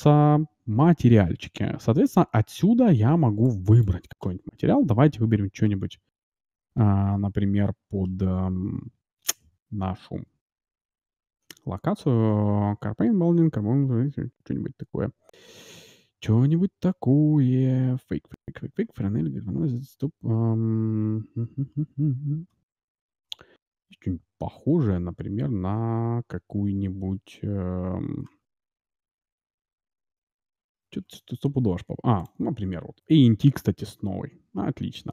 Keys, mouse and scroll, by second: 3.4-5.2 drag, 4.2-5.0 scroll up 1, 5.0-6.8 scroll up 1, 6.8 scroll up 1, 8.8-10.5 scroll down 1, 10.5 scroll down 1, 13.7-15.4 scroll down 1, 15.4-26.8 scroll down 1, 26.8 scroll down 1, 28.2-32.2 scroll up 1, 32.2-33.9 drag, 32.2-32.7 scroll up 1.